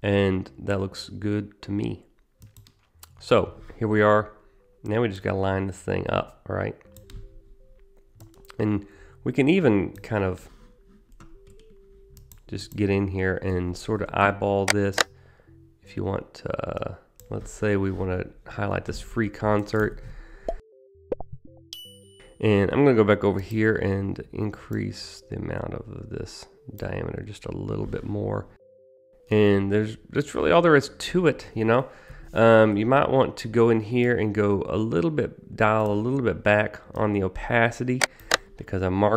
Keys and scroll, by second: 13.6 s, 14.8 s, 36.9 t.